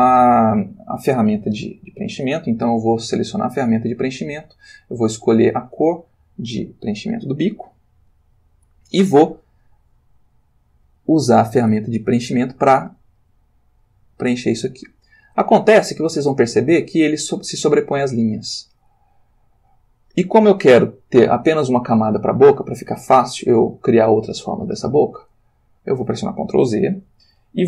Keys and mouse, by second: 3.8 click, 5.5 click, 7.4 click, 13.8 click, 27.0 ctrl+z.